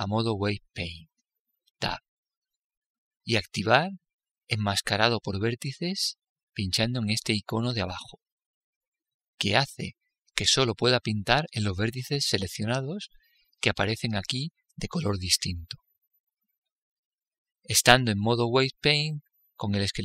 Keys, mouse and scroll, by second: 2.4 Tab, 8.5-10.5 drag, 10.7-12.7 middle drag, 12.7-14.5 drag, 12.7-14.5 right drag, 17.4-20.0 middle drag.